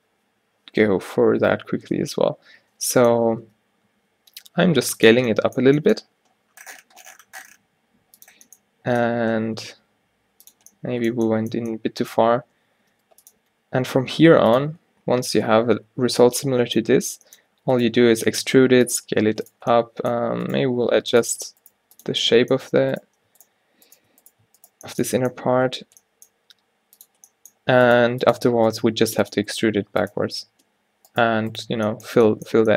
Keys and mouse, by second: 2.4 alt+o, 3.3 s, 5.9 g, 8.5 g, 13.0 g, 13.5 r, 14.7 o, 15.9 o, 17.6 e, 18.1 s, 19.3 g, 20.7 g, 21.8 g, 26.5 g, 28.0-32.7 drag, 28.1 g, 29.0 g, 29.8 g, 30.5 space.